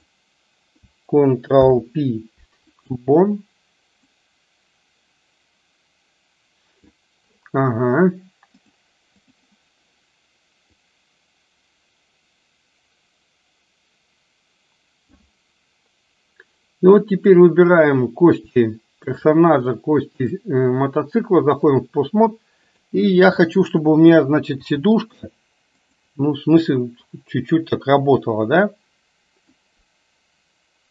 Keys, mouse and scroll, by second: 0.0 click, 1.5 ctrl+p, 4.1-7.0 drag, 8.8 click, 10.9-15.4 drag, 20.3-21.9 drag, 22.6 click, 24.6 r, 27.3-29.8 drag.